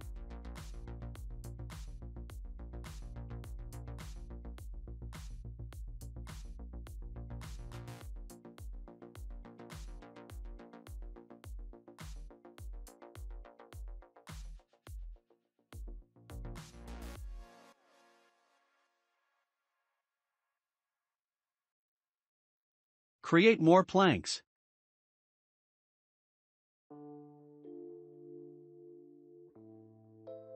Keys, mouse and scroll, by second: 11.0-12.9 shift+middle drag, 12.9 click, 13.4-13.9 scroll down 2, 13.9-18.9 middle drag, 19.4 scroll up 1, 20.3 click, 21.3-22.8 shift+middle drag, 25.2-25.7 scroll up 4, 25.7-30.5 shift+middle drag.